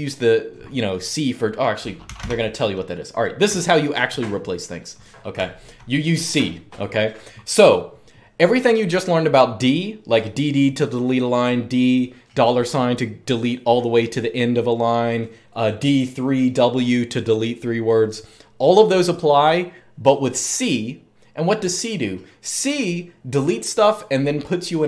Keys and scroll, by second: 1.8 typing, 3.2-3.8 typing, 5.2-5.5 typing.